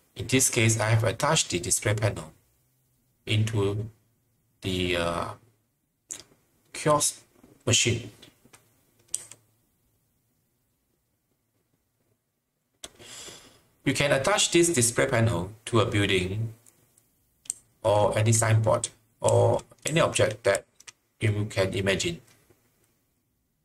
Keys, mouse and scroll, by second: 0.0-0.1 typing, 4.7-5.5 typing, 10.3 typing, 17.2-18.0 typing, 19.3-20.5 typing.